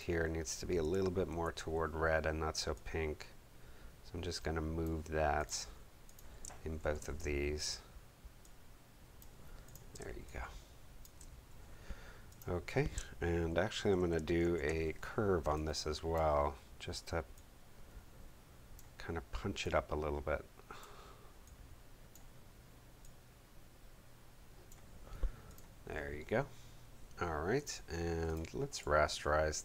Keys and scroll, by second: 1.2 super+u, 6.7 super+u, 9.8 space, 14.3 super+m.